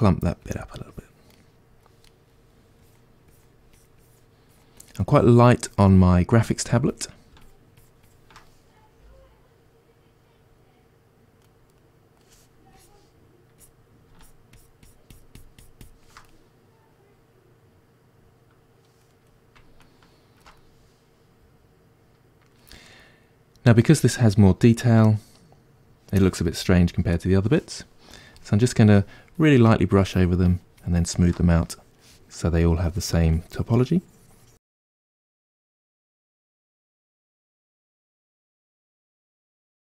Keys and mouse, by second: 1.4-2.9 middle drag, 2.9-8.9 drag, 8.9-12.8 middle drag, 12.8-16.3 drag, 16.3-29.4 middle drag, 29.4-34.7 drag, 34.7 middle click, 35.2-36.8 shift+drag, 36.8-39.9 ctrl+middle drag.